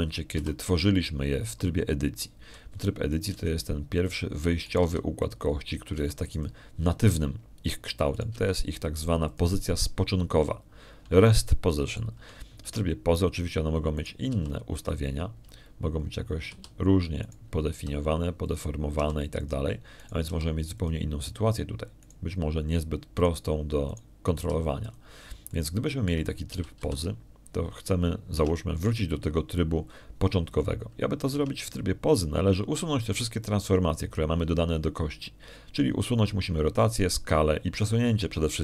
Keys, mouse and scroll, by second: 1.5 Tab, 2.2 a, 5.0 right click, 5.2 g, 5.8 click, 6.5 right click, 6.7 g, 7.1 click, 7.8 g, 8.2 click, 10.0 right click, 10.2 g, 11.2 click, 13.1 shift+click, 14.5 shift+Tab, 15.8 right click, 16.2 r, 16.6 click, 17.8 middle click, 18.4 a, 19.1 right click, 19.6 s, 20.3 click, 20.8 r, 21.2 click, 21.8 right click, 22.1 r, 22.6 click, 23.9 right click, 25.0 right click, 25.8 right click, 26.2 s, 26.7 click, 27.4 shift+click, 28.1 shift+middle click, 28.4 shift+a, 28.6 shift+a, 30.2 Tab, 33.2 Tab.